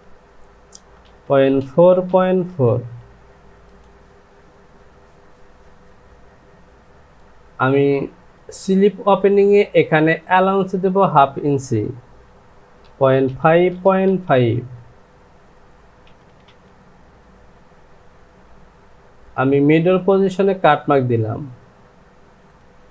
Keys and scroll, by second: 1.0 KP_Decimal, 1.6 KP_4, 1.7 Down, 2.5 KP_Decimal, 12.8 KP_Decimal, 13.4 KP_5, 13.7 Down, 16.3 Down, 16.4 Down.